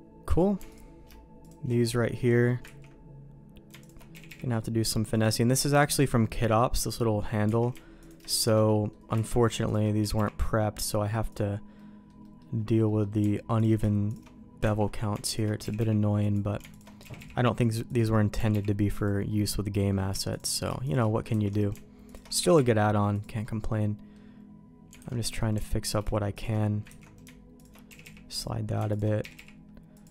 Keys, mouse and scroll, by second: 0.6 alt+click, 1.4 alt+shift+click, 1.7 middle click, 2.3 middle click, 2.6 ctrl+x, 3.8 alt+click, 4.1 g, 5.4 middle click, 6.1 middle click, 6.9 middle click, 7.5 alt+a, 8.6 middle click, 9.3 ctrl+x, 10.0 g, 11.7 middle click, 12.2 middle click, 12.8 middle click, 13.5 alt+click, 14.0 alt+shift+click, 14.8 ctrl+x, 15.6 g, 16.7 alt+click, 17.0 g, 18.3 g, 19.2 middle click, 19.7 middle click, 20.3 alt+click, 21.3 ctrl+x, 22.3 g, 23.4 middle click, 24.9 alt+a, 25.2 middle click, 25.8 alt+click, 26.8 ctrl+x, 27.5 alt+click, 27.8 g, 28.9 alt+click, 29.2 g.